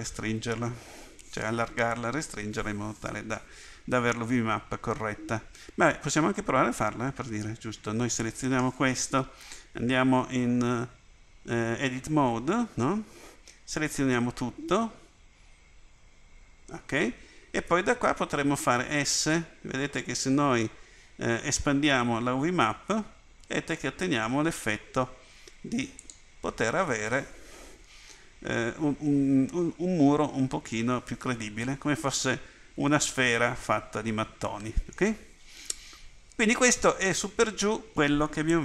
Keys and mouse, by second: 9.9 Tab, 13.8 a, 14.2 a, 16.0 a, 18.7 s.